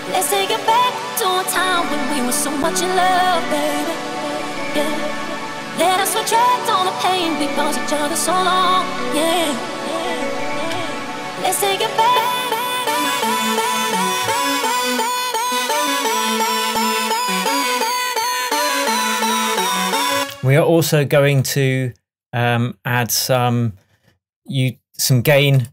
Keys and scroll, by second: 14.3 super+d, 20.2 space.